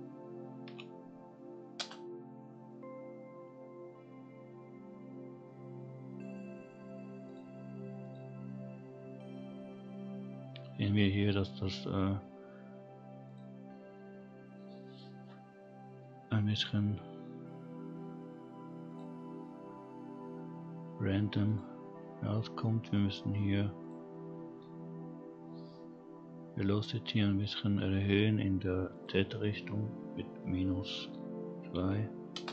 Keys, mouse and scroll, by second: 4.1-5.2 scroll down 2, 5.2-6.2 scroll down 2, 6.2-7.2 scroll up 2, 7.2 click, 8.0 click, 13.3 click, 18.2-18.8 scroll up 1, 18.8 click, 21.4 click, 23.8 click, 25.1-26.8 scroll down 1, 27.6-28.9 scroll down 2, 28.9-32.3 drag.